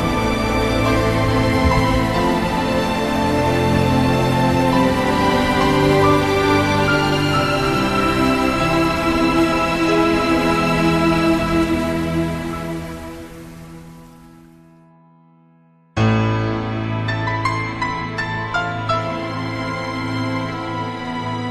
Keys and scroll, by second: 1.4 -, 1.9 +, 4.9 -, 9.3 -, 9.4 +, 11.3 -, 11.4 +, 12.1 -, 16.2 -, 16.7 -.